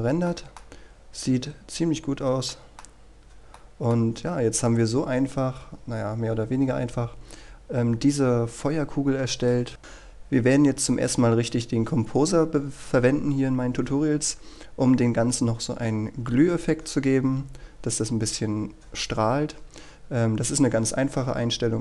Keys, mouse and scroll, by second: 0.3 middle click, 0.7-2.2 scroll up 1, 2.2-2.5 scroll down 1, 2.5 middle click, 2.9-3.6 scroll down 1, 3.6 middle click, 7.9-8.4 scroll down 1, 8.4 scroll up 1, 9.8-10.4 scroll down 1, 14.7-17.6 scroll up 1, 17.6-19.4 scroll down 1, 19.4 scroll up 1.